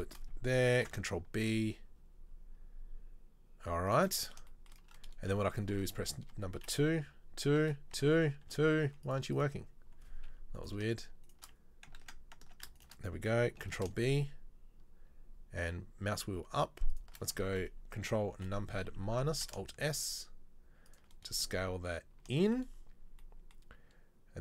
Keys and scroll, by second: 0.9 ctrl+b, 12.1 ctrl+z, 13.8 ctrl+b, 18.4 ctrl+KP_Subtract, 19.5 alt+s.